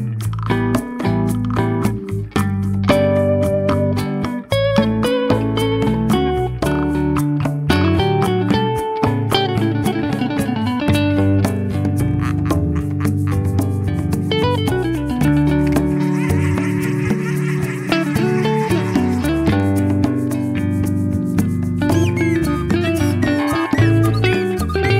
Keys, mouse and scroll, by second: 1.3 click, 2.0-3.0 drag, 3.8-4.6 drag, 5.5 click, 6.3 click, 8.0-9.2 scroll down 3, 9.2 click, 11.0 click, 12.0 click, 13.2 click, 13.9 click, 15.4-16.6 middle drag, 17.7 KP_0, 18.8-19.4 scroll down 3, 19.4-20.4 middle drag, 20.7-21.5 shift+middle drag, 21.7-22.1 scroll up 3, 22.7-23.5 middle drag, 23.8-24.3 shift+middle drag, 24.5-24.9 middle drag.